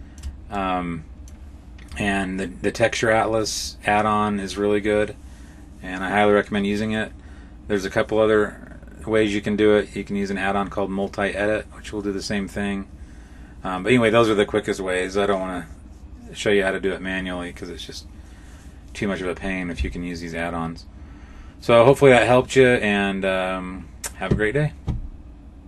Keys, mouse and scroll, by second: 0.4 middle click.